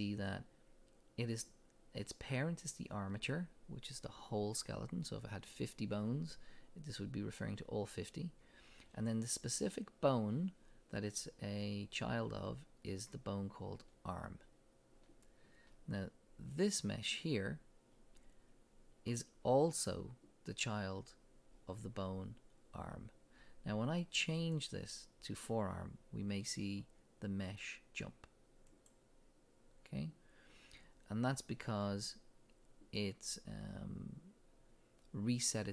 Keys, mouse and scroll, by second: 16.5 click, 24.4-35.7 drag.